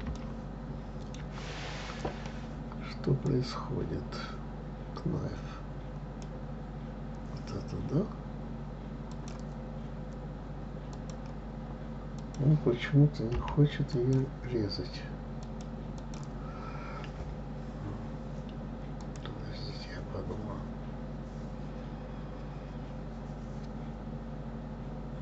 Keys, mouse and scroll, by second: 0.1-3.1 shift+middle drag, 3.2-6.2 drag, 9.1-12.1 drag.